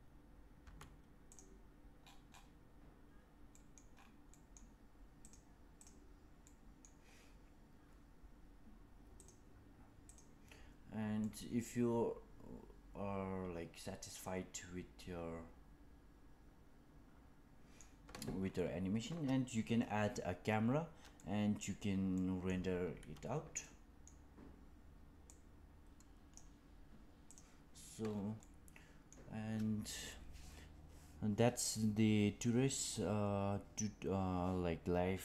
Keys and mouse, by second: 0.5 space, 1.2 click, 3.4 middle click, 4.2 middle click, 5.3 click, 6.4 middle click, 9.1 click, 10.3 click, 11.1-13.0 middle drag, 13.2-17.7 middle drag, 21.1 middle click, 22.1 middle drag, 23.5-24.0 middle drag, 25.2-26.2 drag, 27.2 click, 28.3-29.0 middle drag.